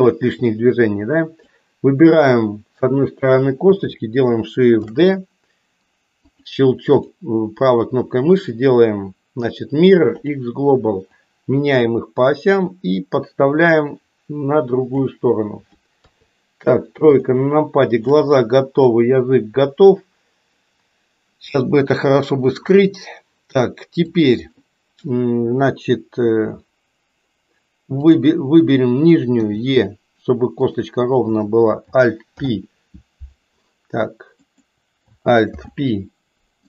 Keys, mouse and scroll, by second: 0.9 click, 4.8 shift+d, 7.8-11.3 right drag, 11.3-14.9 drag, 15.9 KP_3, 17.3 shift+middle click, 21.6-22.7 shift+middle drag, 28.0 click, 29.4 e, 31.2 click, 32.3 alt+p, 34.4 click, 35.4 alt+p.